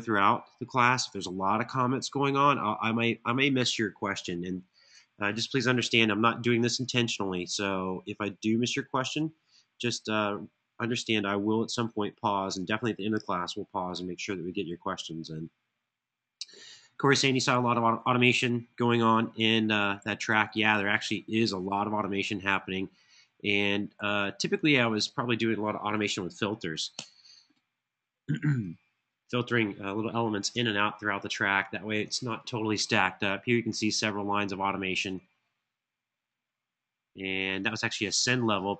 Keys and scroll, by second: 19.0 super+Tab, 21.6 super+=, 26.7 Return, 30.3 ctrl+alt+Page_Down, 30.6 ctrl+alt+Page_Down, 30.8 ctrl+alt+Page_Down, 31.1 ctrl+alt+Page_Down.